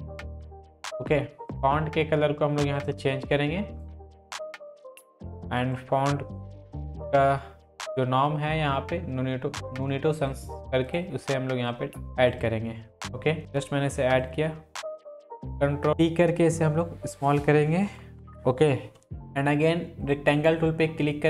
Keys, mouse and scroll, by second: 0.0-0.8 typing, 0.7 click, 6.1 click, 10.3 click, 13.4 ctrl+t, 14.2-16.6 drag, 18.0 Up, 18.2 click, 20.1-21.2 drag.